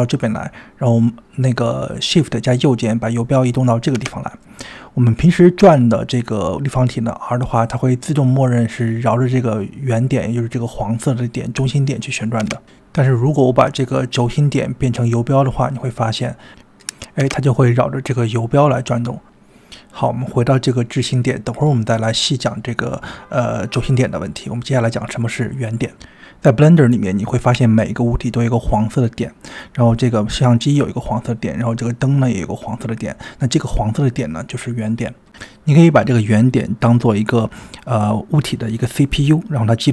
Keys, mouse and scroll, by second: 1.3 click, 4.0-5.2 shift+right drag, 5.3 middle click, 6.1 click, 8.8-10.4 drag, 10.6 click, 11.1 r, 12.2 click, 12.8 r, 15.8-16.9 drag, 17.2 r, 21.2-22.6 drag, 23.0 click, 26.6 click, 28.2 click, 30.1 click, 31.2 shift+middle click, 31.9 click.